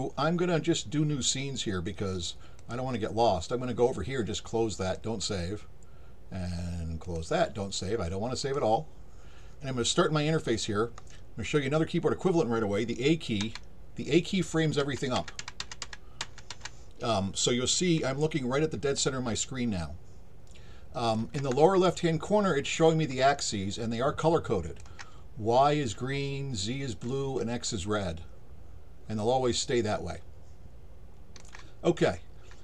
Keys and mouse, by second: 2.6 click, 4.9 click, 7.0 click, 8.4 click, 18.2-21.1 alt+drag, 22.8-24.8 alt+drag, 27.7-31.4 alt+drag.